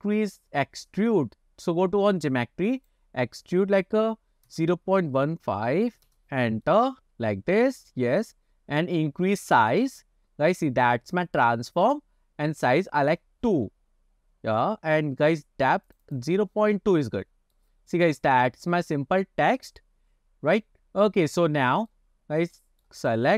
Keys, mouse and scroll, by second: 0.4 click, 2.9-6.2 drag, 6.7-8.0 middle drag, 8.7-9.1 scroll down 2, 11.9-14.1 drag, 14.2 scroll up 2, 16.0 click, 16.1 click, 16.9 scroll down 2, 17.3-17.6 middle drag, 17.9 scroll up 1, 18.3-22.0 middle drag, 22.6-22.9 middle drag, 23.1 click.